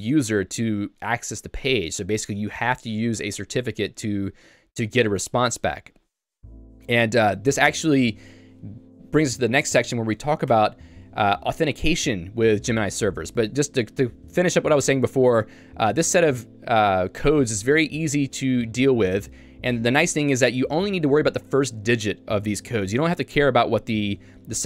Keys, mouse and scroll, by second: 10.5 Tab, 15.6 k, 19.6 h, 19.8-21.2 h, 22.6-24.6 typing.